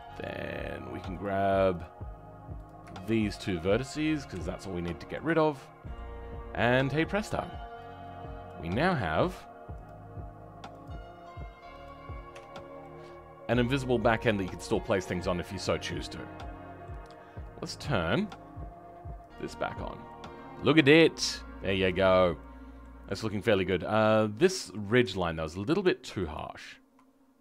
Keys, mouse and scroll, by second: 1.2-3.4 drag, 5.2 Delete, 5.6-7.2 middle drag, 7.2-8.4 drag, 12.3 Tab, 12.5 scroll down 2, 12.8-15.8 middle drag, 19.2 click, 19.6-20.0 scroll down 2, 20.0 middle click, 20.8 scroll up 2, 21.2 middle click, 21.9 click, 22.1 scroll down 2, 22.4 middle click, 23.0 scroll up 2, 24.5 shift+middle click, 25.0 Tab, 26.3 alt+click.